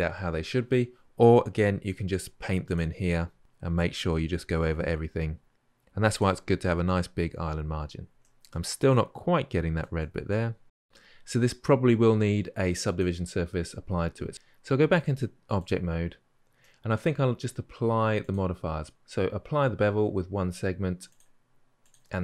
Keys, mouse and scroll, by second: 2.4 f, 3.3-3.8 drag, 4.0-5.7 drag, 5.7 f, 5.8-6.5 drag, 6.8-10.5 drag, 10.5 scroll down 2, 10.6-14.3 middle drag, 14.3-22.2 drag.